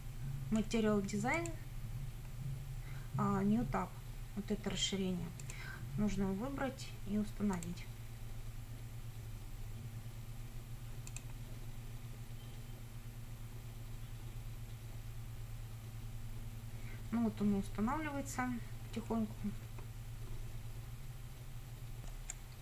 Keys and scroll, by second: 22.3 F9.